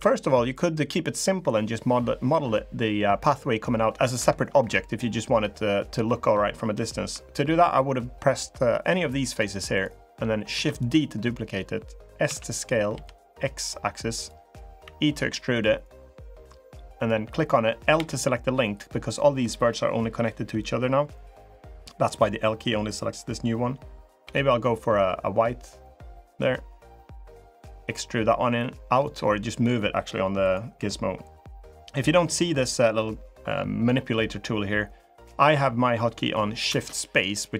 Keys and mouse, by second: 3.9 Escape, 9.1 click, 10.3 shift+d, 12.0 s, 14.6 e, 16.8 click, 24.0 g, 26.1 click, 27.2-28.8 drag, 30.2 click, 36.5 shift+space.